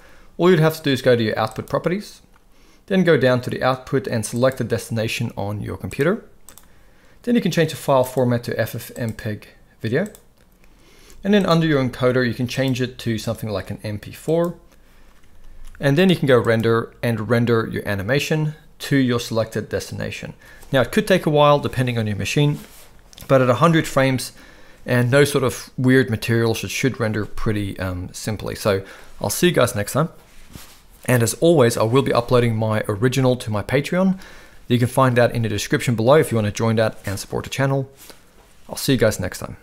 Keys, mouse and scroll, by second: 1.5 click, 4.4 click, 8.0-8.4 drag, 8.9-10.1 drag, 11.4 click, 12.6-14.4 drag, 15.4 ctrl+s, 16.4-18.5 drag.